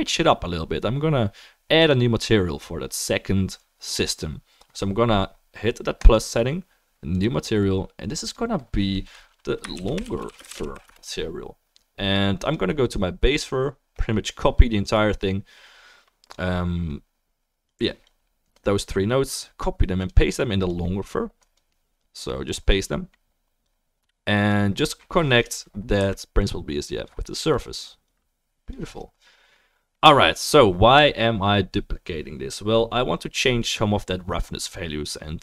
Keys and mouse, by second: 6.0-8.1 drag, 8.2-12.6 drag, 14.6-16.7 drag, 14.6-16.7 middle drag, 20.1 click, 20.7 click, 21.0-25.4 middle drag, 21.0-34.6 right drag, 23.7-25.4 drag, 26.0 Delete, 26.4-27.6 drag, 26.4-27.6 middle drag, 28.1-34.6 drag, 28.1-34.6 middle drag.